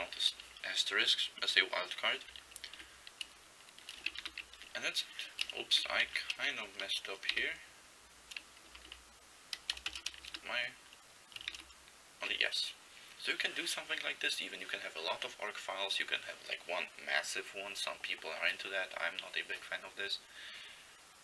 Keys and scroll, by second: 0.0-0.6 typing, 2.8 Delete, 4.3 ), 5.7 Left, 6.0 ", 7.3 ), 8.8 Right, 8.9 Right, 10.0 BackSpace, 10.3 =, 11.4 typing.